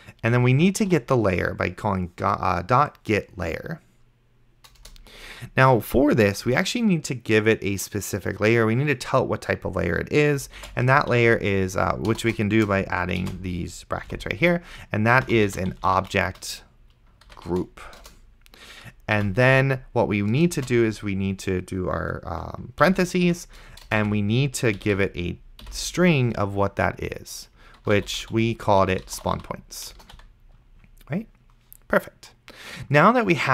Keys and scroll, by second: 0.1-1.7 typing, 4.8 Return, 10.9 shift+,, 11.4 shift+o, 12.1 BackSpace, 13.4 shift+,, 13.6 shift+., 14.1 Left, 15.1-18.1 typing, 19.2 End, 20.9 shift+9, 22.9 End, 23.2 :, 23.9 BackSpace, 24.1 ;, 24.8 Left, 25.7 :, 27.8-30.1 typing.